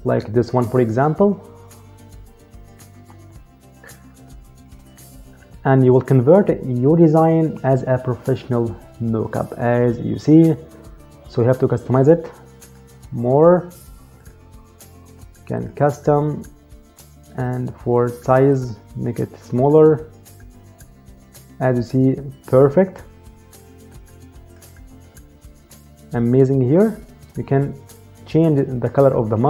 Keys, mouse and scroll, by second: 12.3 click, 18.2 click, 23.6 click.